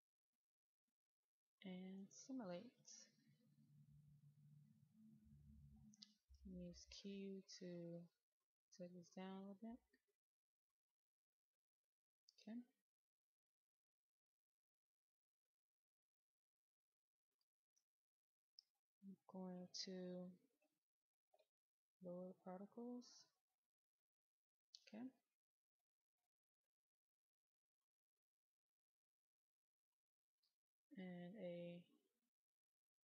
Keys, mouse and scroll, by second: 6.0 q, 6.3 click, 7.9 q, 8.0 q, 14.7 click, 16.6 shift+click, 25.6-27.8 right drag, 30.0 click, 30.9-32.7 scroll up 1, 32.7-33.0 drag.